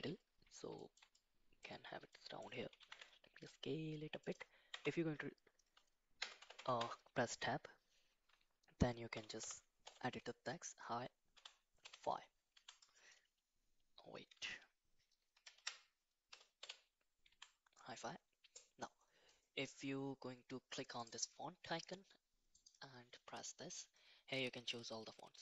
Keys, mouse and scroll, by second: 0.8 shift+middle click, 1.2 middle click, 2.1 middle click, 2.8 s, 4.7 Tab, 6.2 BackSpace, 6.4 BackSpace, 6.5 BackSpace, 7.4 BackSpace, 9.1 shift+h, 9.4 shift+i, 9.8 shift+-, 11.3 shift+f, 11.8 shift+i, 12.5 Tab, 14.3 Tab, 15.3 Left, 15.6 Left, 16.3 BackSpace, 16.6 -, 17.3 Tab, 21.0 click, 22.6 click.